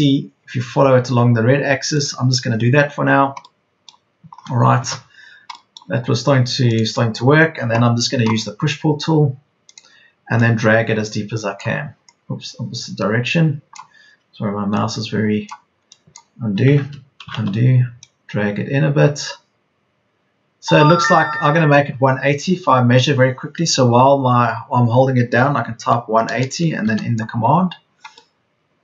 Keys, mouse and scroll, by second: 3.0 scroll down 1, 3.8 scroll down 1, 3.9 middle click, 4.8-15.7 middle drag, 16.8 ctrl+z, 18.8 ctrl+z, 23.5 ctrl+z, 25.5 KP_1, 26.0 KP_8, 26.2 KP_0.